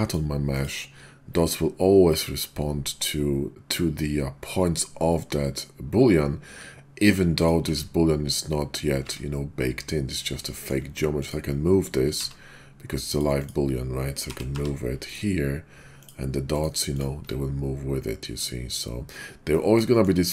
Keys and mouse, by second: 0.6 click, 7.4 click, 7.6 Tab, 9.0 Tab, 10.5 shift+drag, 11.2 click, 12.1 q, 13.4 click, 14.2 g, 14.5 y, 15.1 click, 15.9 click, 16.5 click, 19.9 shift+click.